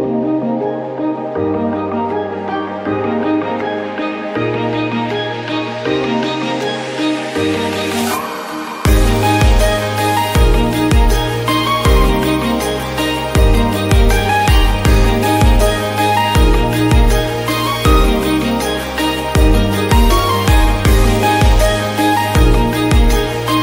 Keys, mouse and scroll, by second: 0.6-2.6 scroll down 1, 2.6-4.6 scroll down 1, 4.6-12.9 scroll down 1, 12.9-23.6 scroll down 1.